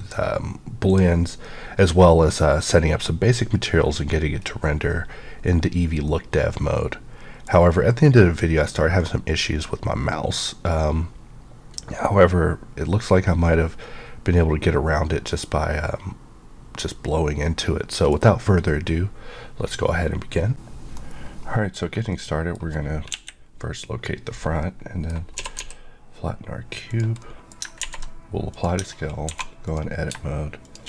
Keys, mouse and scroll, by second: 6.1 middle click, 7.6 scroll up 1, 9.0 middle click, 21.8 scroll down 1, 22.1 middle click, 25.3 typing, 26.9 click, 27.2 middle click, 27.6 scroll up 2, 27.8 ctrl+a, 28.5 click, 28.7 Tab, 29.2 2, 29.6 click, 30.6 shift+click.